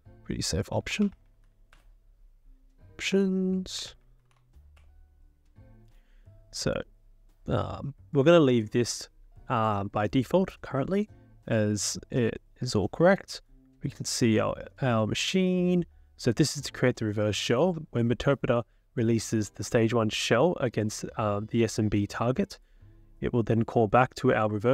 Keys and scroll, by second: 0.7-1.7 typing, 2.9-4.4 typing.